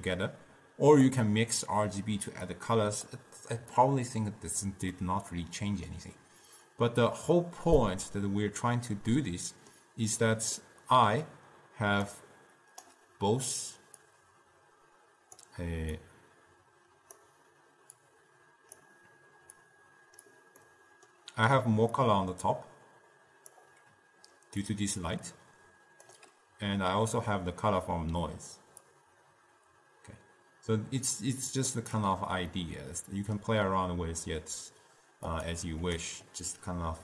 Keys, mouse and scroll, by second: 2.7 click, 3.9-5.2 drag, 5.2-10.3 middle drag, 10.3 scroll up 2, 10.4-12.0 middle drag, 12.0 d, 12.2-14.2 right drag, 14.2-20.7 drag, 20.7-22.3 middle drag, 22.3-24.0 drag, 24.0-24.8 d, 24.8-26.2 drag, 26.2 d, 26.3 d, 27.8 d, 29.0-32.1 drag, 32.6 scroll up 2, 32.7-35.4 middle drag, 35.4 click, 36.1 d, 36.2 right click.